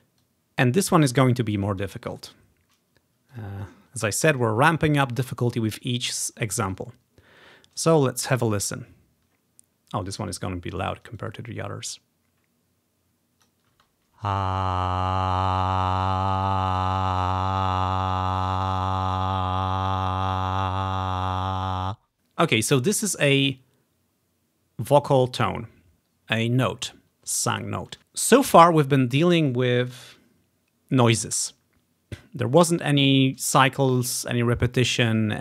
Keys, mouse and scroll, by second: 0.3-1.9 drag, 2.2 click, 3.4 click, 4.0-5.2 ctrl+drag, 6.4-7.3 scroll up 3, 7.4 scroll down 2, 8.4-9.4 drag, 11.2-13.5 drag, 13.9 space, 25.9-26.6 ctrl+scroll up 2, 26.6-28.0 ctrl+scroll up 1.